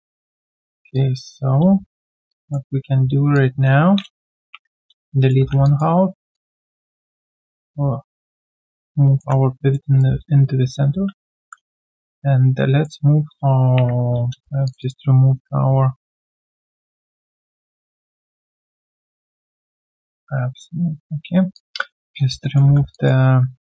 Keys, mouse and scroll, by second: 0.6-0.9 alt+scroll down 1, 0.9 alt+click, 1.6 q, 1.8 right click, 2.3 alt+click, 4.4 Delete, 5.0 right click, 5.5 w, 5.6 alt+click, 6.3 alt+click, 6.6 alt+double click, 7.5 alt+right click, 7.9-9.9 typing, 8.6 middle click, 9.6 alt+click, 9.8 alt+right click, 10.9 ctrl+d, 11.3 e, 14.8 double click, 21.5 alt+click, 21.8 alt+right click, 22.4 alt+middle click, 22.7-23.6 typing, 22.9 alt+click.